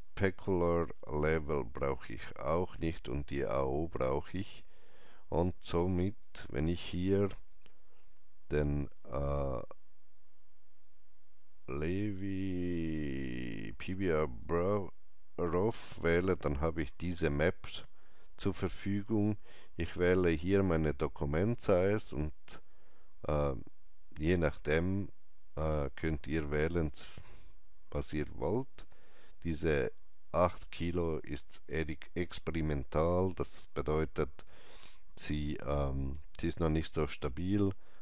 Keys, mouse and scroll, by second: 1.8 click, 6.1 click, 10.7 click, 10.7-11.4 scroll down 1, 11.4-11.9 scroll down 1, 12.5-14.2 scroll down 1, 14.3 click, 20.1 click, 20.1-22.3 scroll down 1.